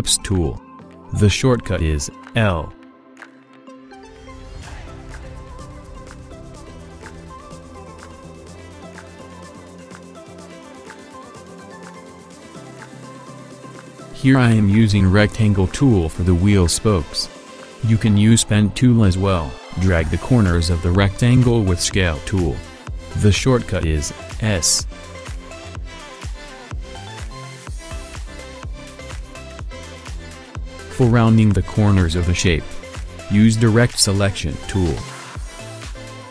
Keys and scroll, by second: 1.7 ctrl+alt+shift+f, 6.2 ctrl+alt+shift+f, 16.9 a, 24.4 v, 29.7 a, 34.4 v.